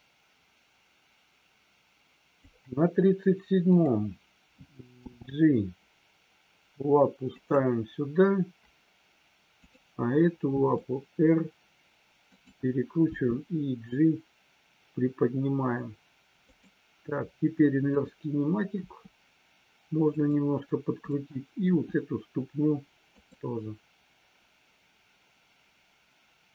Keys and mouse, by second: 3.7 click, 4.9 g, 7.3 click, 9.5 click, 10.5 r, 12.3 click, 12.9 g, 16.4 click, 18.7 r, 20.1 click, 21.7 r.